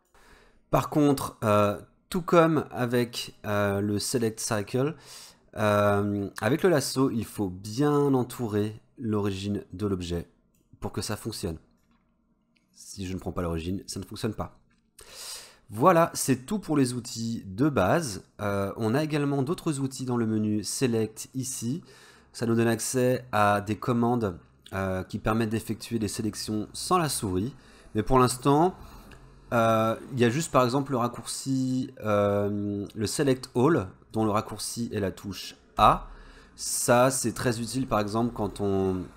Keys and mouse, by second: 7.8-10.6 drag, 11.4 click, 11.8-13.7 drag, 21.5-33.7 drag, 34.2 click, 35.8 a, 37.1 click.